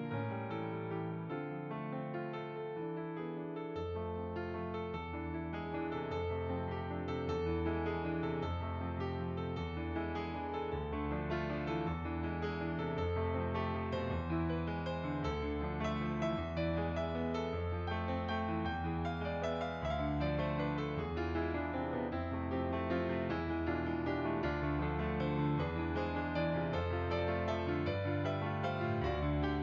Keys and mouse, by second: 0.0 click, 2.1 s, 2.1 click, 2.8 g, 3.5 click, 3.8 middle click, 6.6 click, 9.4 click, 10.6 middle click, 12.5 click, 13.6 f, 13.8 click, 14.7 click, 17.0 f, 17.3 click, 21.4 click, 21.7 middle click, 22.8 click, 26.4 click, 27.7 click.